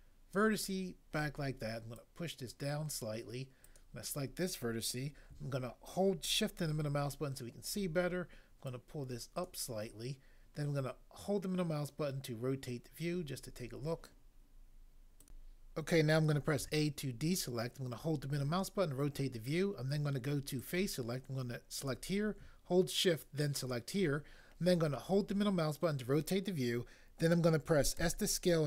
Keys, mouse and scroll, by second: 16.5 a, 28.0 s.